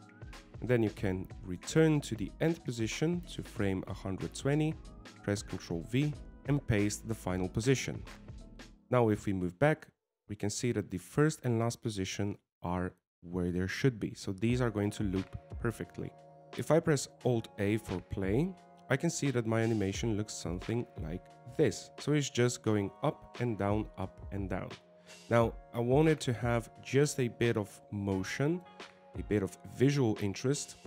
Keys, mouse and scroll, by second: 0.1 ctrl+c, 3.2 click, 6.4 ctrl+v, 11.2 click, 12.9 click, 13.9 click, 20.2 alt+a, 27.0 click, 28.0 click.